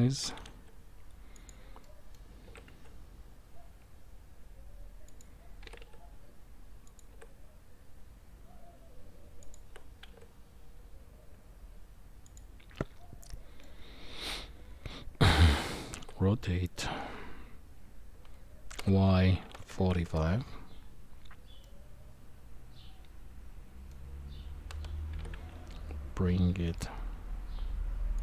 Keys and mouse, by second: 0.2 g, 1.8-2.1 middle drag, 2.4 s, 5.6 g, 7.1 s, 9.7 s, 12.7-13.6 middle drag, 15.9 r, 21.7-23.9 middle drag, 25.2 g, 28.1-28.2 drag.